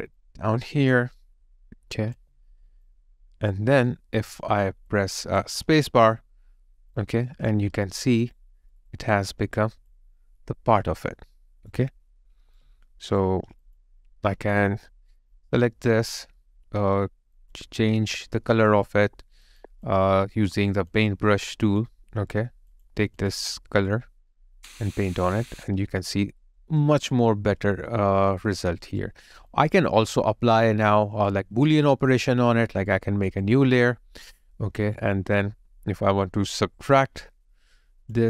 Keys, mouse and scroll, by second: 2.1 alt+right click, 2.2 alt+click, 5.9 space, 7.6 space, 7.7 alt+right click, 8.8 alt+middle click, 9.6 alt+click, 10.1 alt+middle click, 11.1 alt+right click, 15.5 double click, 18.9 double click, 23.2 double click, 25.5 double click, 25.7 alt+right click, 26.8 alt+middle click, 27.3 alt+right click, 28.7 alt+right click, 29.5 alt+click, 30.0 alt+middle click, 30.6 alt+right click, 31.3 alt+middle click.